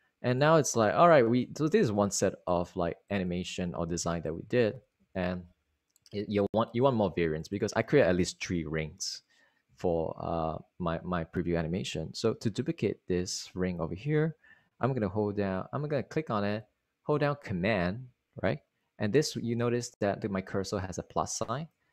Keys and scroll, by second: 5.6 super+s.